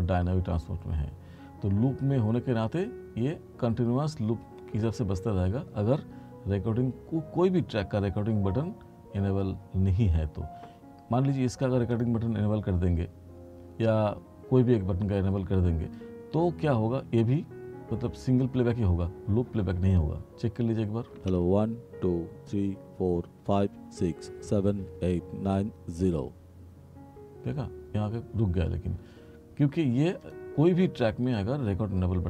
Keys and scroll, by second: 21.2 space.